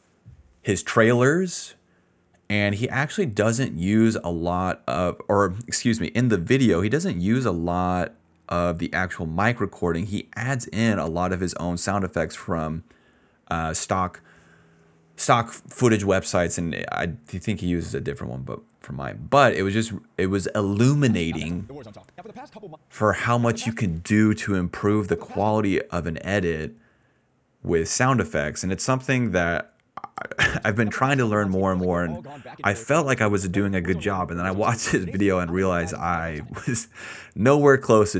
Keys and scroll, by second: 10.0-12.5 typing, 13.9 s, 20.8 ctrl+s, 20.9 space, 21.4 d, 22.6 space, 23.1 space, 23.6 space, 24.8 space, 25.5 space, 27.7 s, 28.2 ctrl+s, 30.0 space, 30.2 d, 31.6 s, 32.3 s, 35.1 d, 36.5 space, 37.4 s.